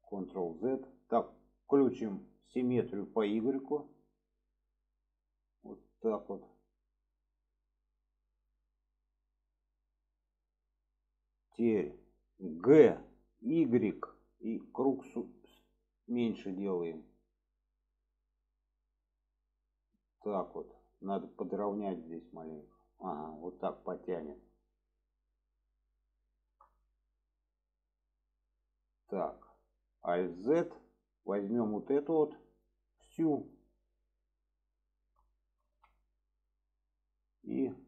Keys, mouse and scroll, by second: 0.0 ctrl+z, 4.1 click, 22.9 click, 23.5-25.0 middle drag, 25.3-25.6 middle drag, 26.3-26.6 shift+middle drag, 27.1-29.8 middle drag, 30.0 alt+z, 30.8-31.4 drag, 32.0-32.7 drag, 33.1-33.5 shift+drag, 34.0-35.0 shift+drag, 35.7 alt+z, 36.3-37.6 middle drag.